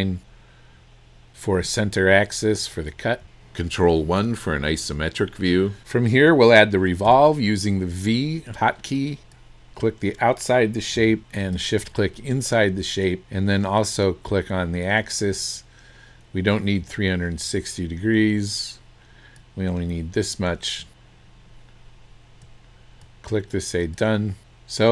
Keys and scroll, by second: 1.6 Escape, 7.1 v.